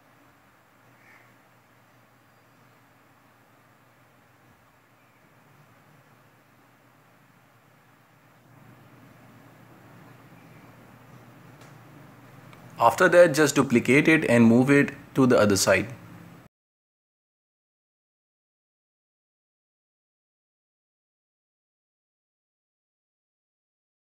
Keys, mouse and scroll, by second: 0.5 middle drag, 0.7 scroll down 5, 0.9-1.7 shift+middle drag, 1.7 scroll up 1, 1.9 space, 2.7-3.5 shift+right drag, 3.5-5.3 middle drag, 5.3 alt+d, 7.6 shift+Tab, 7.9 g, 11.0 ctrl+m, 12.9 middle click, 13.5 space, 14.3-15.6 middle drag, 15.6 space, 15.9 right click, 16.9 scroll down 1, 17.5-18.2 shift+middle drag, 18.2-19.0 drag, 19.0 shift+middle click, 19.9 shift+a, 23.4-24.1 scroll up 1, 24.1 click.